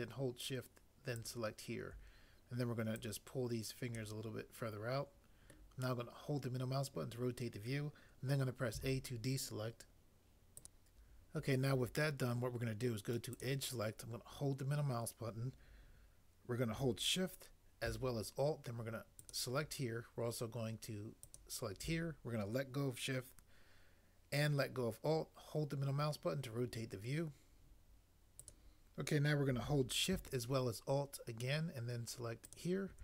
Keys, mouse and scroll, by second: 8.8 a.